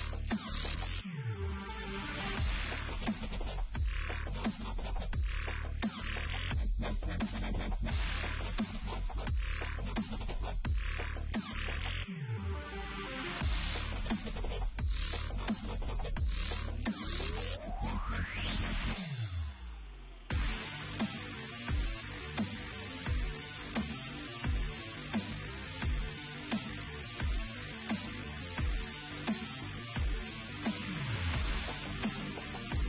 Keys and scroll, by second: 0.0 Return, 1.1-3.1 typing, 9.1-11.3 typing, 13.9-14.6 typing.